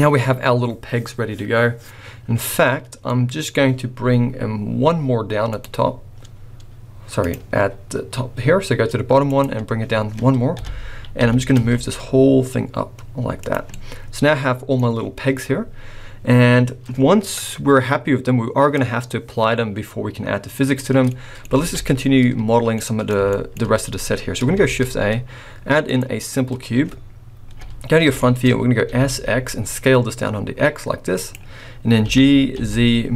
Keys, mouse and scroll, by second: 0.0-0.6 scroll up 1, 3.1 middle click, 5.5 click, 7.2 click, 9.2 click, 10.6 KP_1, 11.2 g, 13.9 middle click, 21.1 middle click, 21.6 alt+a, 22.7 middle click, 23.3 shift+middle click, 23.6 scroll up 1, 24.6 shift+a, 26.7-27.3 scroll down 1, 27.5 KP_1, 28.2 shift+middle click, 28.4 scroll up 4, 28.9 s, 32.1 g.